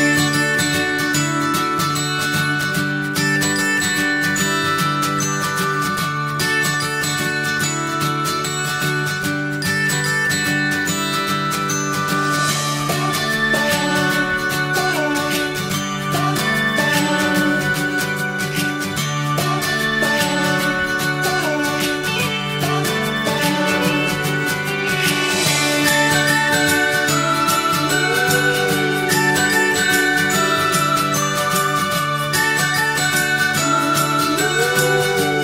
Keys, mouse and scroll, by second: 0.0 click, 0.2 shift+middle click, 0.3 Tab, 0.3-1.4 shift+middle drag, 1.4 scroll up 1, 1.5 shift+middle click, 2.0 click, 2.1 middle click, 2.9 e, 3.4-4.1 shift+scroll up 1, 4.1 r, 4.8 middle click, 5.9 o, 6.0 click, 6.5 middle click, 6.6-6.9 scroll up 2, 6.7 shift+middle click, 6.9 click, 7.1 ctrl+shift+b, 8.1 Tab, 8.2 scroll down 2, 8.3 middle click, 8.5 alt+z, 8.7 shift+middle click, 9.2 scroll down 1, 9.3 middle click, 9.9 click, 10.1 shift+middle click, 10.2 scroll up 3, 10.3-12.8 middle drag, 12.8 click, 12.9 click, 13.1-15.2 shift+middle drag, 15.2 ctrl+s, 15.6-16.8 middle drag, 16.8-17.4 scroll up 1, 17.4 shift+a, 18.7 click, 19.1 shift+a, 21.5-24.2 alt+middle drag, 24.2 scroll up 1, 26.4 shift+middle click, 26.9 e, 31.0 scroll down 1, 31.2-32.3 shift+middle drag, 32.3 e, 35.3 scroll down 1.